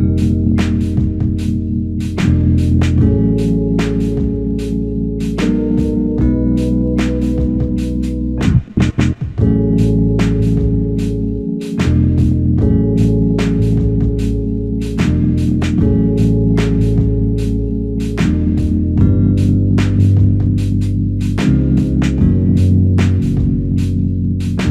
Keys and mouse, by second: 1.5 alt+click, 3.5 ctrl+click, 6.9 shift+click, 8.1 shift+click, 9.6 shift+click, 11.6 alt+click, 12.1 alt+click, 14.7 alt+shift+click, 15.2 alt+click, 16.2 f, 17.2 double click, 19.4 shift+click, 20.7 shift+click, 23.1 shift+click, 24.1 alt+click.